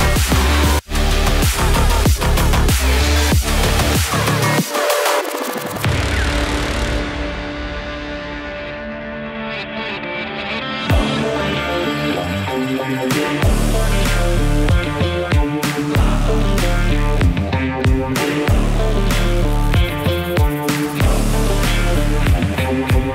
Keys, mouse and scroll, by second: 0.9 click, 4.0-5.0 typing, 6.0 click, 6.7 typing, 7.1 Return, 8.5 typing, 8.9 click, 15.3-17.0 drag, 22.9-23.1 typing.